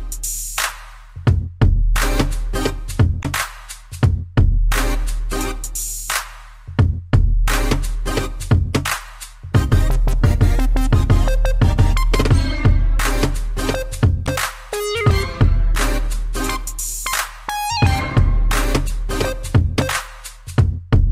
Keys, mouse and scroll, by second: 0.5 scroll down 1, 1.1 shift+middle click, 1.4 shift+middle click, 2.6 a, 4.1 click, 6.1 click, 6.1 click, 6.5 scroll down 1, 8.0 click, 8.0 click, 8.5 click, 8.6 click, 9.3 click, 10.7 shift+middle click, 11.7 Up, 12.6 shift+middle click, 12.9 shift+scroll, 13.1 scroll up 2, 14.6 click, 14.7 click, 15.9 click, 19.7 middle click, 20.3 scroll down 3, 20.7 middle click.